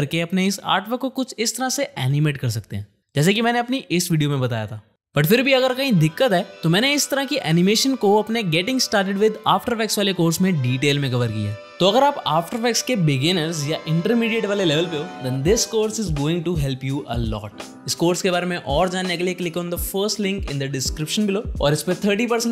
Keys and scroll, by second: 11.6 u.